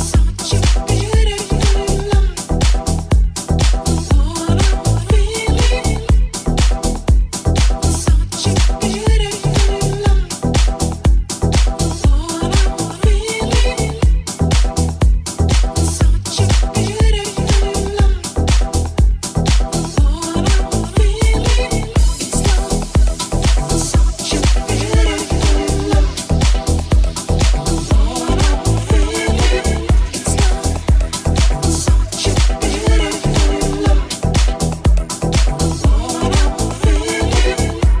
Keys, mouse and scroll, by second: 4.4 ctrl+r, 10.6-14.3 drag, 11.6 alt+z, 11.9 alt+z, 12.4 g, 14.3-18.3 middle drag, 14.6 g, 16.7 g, 17.8 alt+z, 18.3-19.5 alt+drag, 18.4 alt+z, 18.6 g, 19.5-26.1 middle drag, 20.0 Tab, 21.2 w, 24.3 Tab, 25.5 alt+z, 26.1 right click, 26.2-30.0 middle drag, 26.8 ctrl+alt+z, 29.5-34.5 drag, 32.7 g, 34.5-36.8 shift+middle drag, 36.8-38.0 drag, 36.8 g.